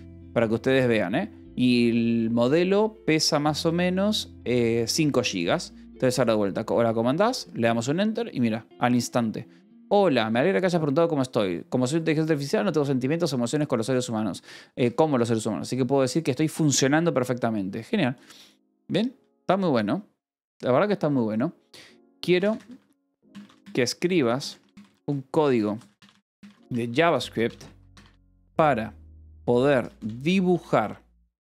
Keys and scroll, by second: 7.3 Return, 22.0-31.4 typing.